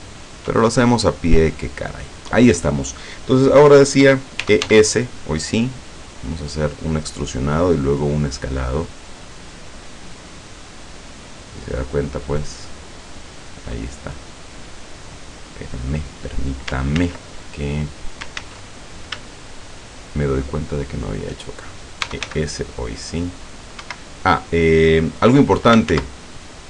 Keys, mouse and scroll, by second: 0.2 shift+right click, 0.8 shift+scroll down 1, 1.1-2.3 middle drag, 2.6 scroll down 2, 3.2 scroll up 2, 4.5 e, 4.7 s, 8.7 click, 9.2 scroll down 1, 9.7-14.5 middle drag, 14.7 middle click, 15.1-16.7 middle drag, 17.0 ctrl+z, 17.5-17.9 ctrl+scroll up 1, 18.4 ctrl+z, 19.6 shift+right click, 20.9 shift+right click, 22.1 e, 22.3 s, 23.8 Escape, 25.9 ctrl+z.